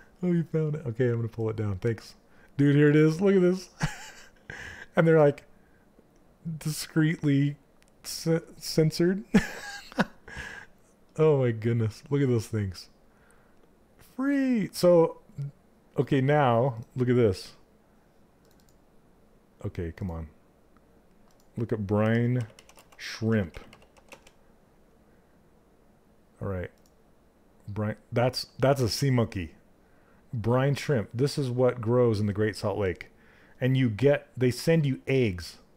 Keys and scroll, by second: 21.3-23.9 typing.